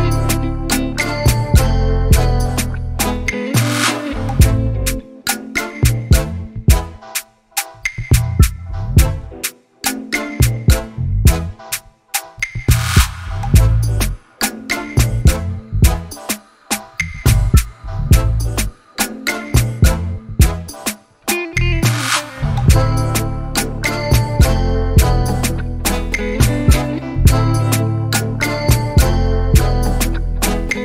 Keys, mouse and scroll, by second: 9.4 click, 10.1-10.5 scroll up 1, 10.5-11.0 scroll down 1, 11.0 z, 13.3 alt+click, 14.2 s, 20.7-22.9 shift+middle drag, 22.9 s, 26.6 Tab, 27.6 Tab, 30.5 click.